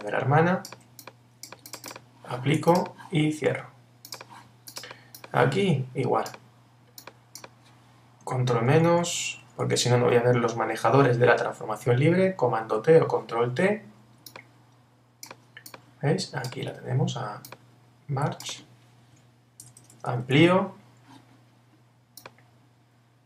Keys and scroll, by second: 8.5 super+-, 12.6 super+t, 19.6 super++.